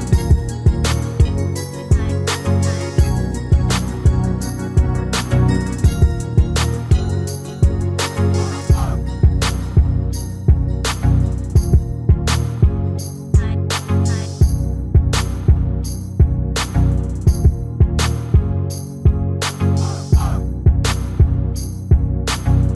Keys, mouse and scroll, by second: 7.1-12.1 middle drag, 12.6-14.3 middle drag, 15.1 KP_7, 15.5 scroll up 1, 15.8-17.1 middle drag, 17.1-18.9 drag, 18.4 Tab, 18.9-20.7 middle drag, 21.6-22.7 drag, 22.6-22.7 right drag.